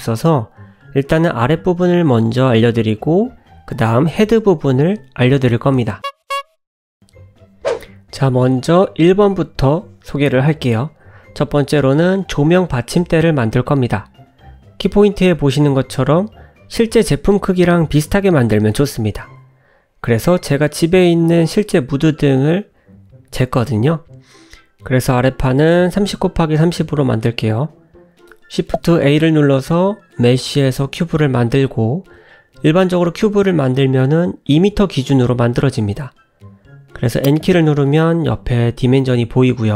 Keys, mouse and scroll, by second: 4.8 click, 4.8 scroll down 1, 7.0 click, 7.5 KP_Decimal, 8.4 middle click, 9.5 scroll up 1, 10.0 click, 11.3 shift+middle click, 12.6 `, 13.7 shift+middle click, 15.8-16.3 scroll up 1, 20.8 scroll down 2, 21.2 shift+middle click, 23.6 shift+right click, 24.3 middle click, 25.5-26.2 scroll up 2, 26.4 shift+middle click, 28.2 shift+a, 31.6-32.4 scroll down 7, 32.8 middle click, 34.3 click, 34.3 n, 34.7 click, 37.0 click.